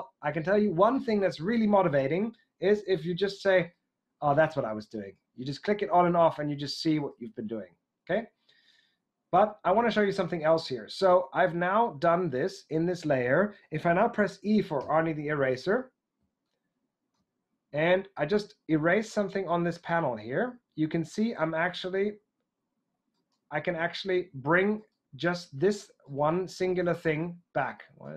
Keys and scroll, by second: 14.7 e.